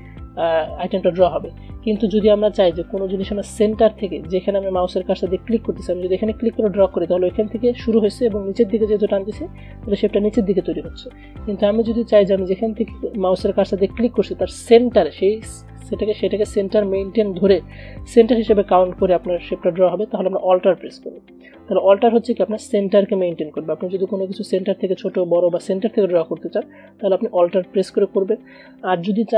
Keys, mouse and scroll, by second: 1.3 Delete, 6.2-11.3 drag, 11.3 BackSpace, 14.5-24.5 drag.